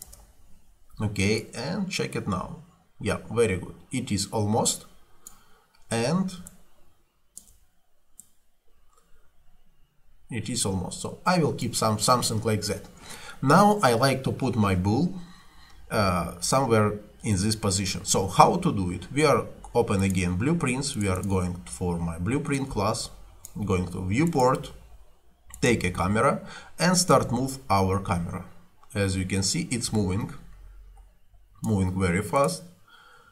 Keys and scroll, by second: 0.1 Return.